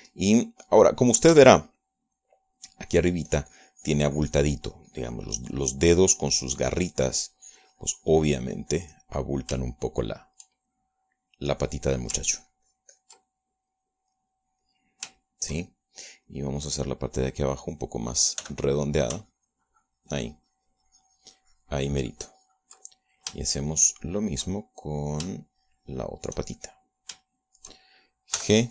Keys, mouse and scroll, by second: 0.8 shift+middle click, 1.7 click, 2.7 f, 3.4 click, 3.8 middle click, 4.4-10.9 drag, 11.0 shift+middle click, 12.1-13.3 shift+middle drag, 13.6 ctrl+click, 14.7 ctrl+middle click, 16.6 shift+middle click, 17.4 middle click, 18.3 middle click, 19.8 f, 20.2 ctrl+click, 20.6-24.8 ctrl+drag, 25.1 shift+middle click, 25.8-27.4 shift+drag, 27.4 shift+middle click, 28.2 shift+middle click.